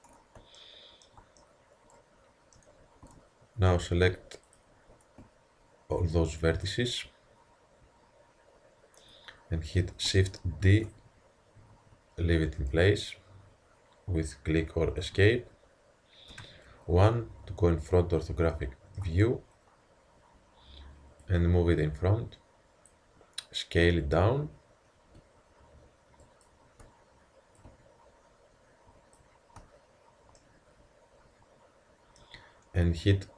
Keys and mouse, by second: 3.1 Tab, 6.6 click, 6.7-7.9 middle drag, 10.6 shift+d, 16.3 KP_1, 21.2-23.2 drag, 23.9 s, 27.6-30.0 drag, 30.0-31.2 middle drag.